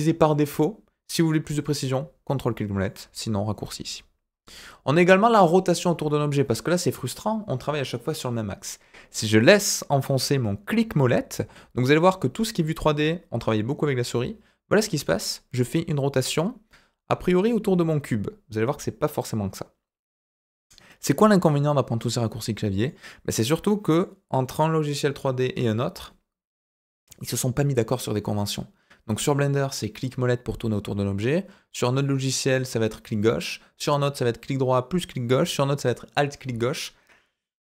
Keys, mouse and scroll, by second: 0.3 scroll up 2, 1.6-2.8 ctrl+middle drag, 5.2-5.8 scroll down 5, 6.2-9.3 scroll up 1, 10.7-20.2 middle drag, 21.0-22.3 middle drag, 22.8-23.9 middle drag.